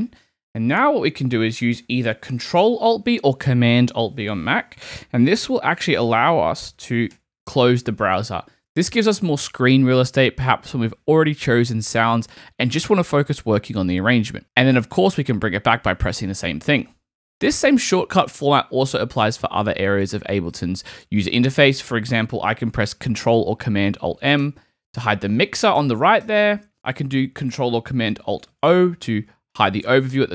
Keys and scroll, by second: 7.1 alt+super+b, 16.7 alt+super+b, 24.4 alt+super+m, 29.0 alt+super+o.